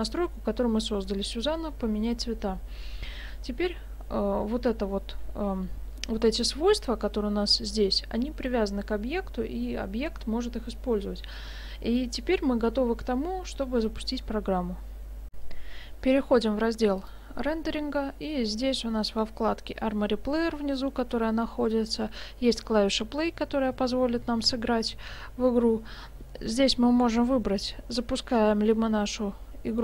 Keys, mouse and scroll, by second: 15.3 F9, 17.0 click.